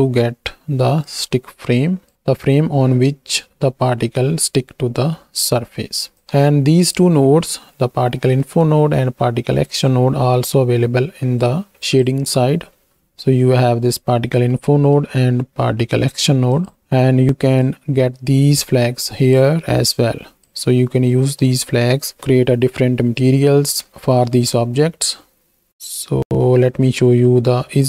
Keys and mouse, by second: 1.0-2.1 drag, 6.2 x, 7.2 x, 8.3 middle click, 9.7 click, 10.1 x, 11.1 middle click, 12.9 middle click, 14.5-15.0 middle drag, 16.5 click, 17.8-19.4 drag, 20.0 click, 22.2 KP_1, 23.3 shift+drag, 24.7 z.